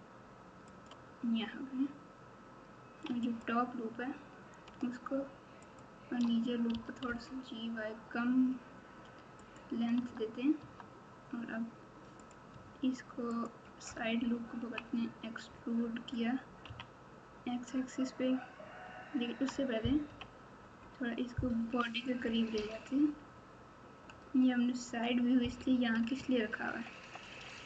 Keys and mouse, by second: 3.3 alt+click, 5.6 alt+shift+click, 6.7 g, 9.9 Tab, 10.6 Tab, 12.2 click, 13.3 ctrl+click, 14.5 KP_1, 16.6 KP_3, 19.2 Tab, 20.0 KP_1, 21.5 KP_3, 26.4 ctrl+KP_8, 26.9 ctrl+KP_8.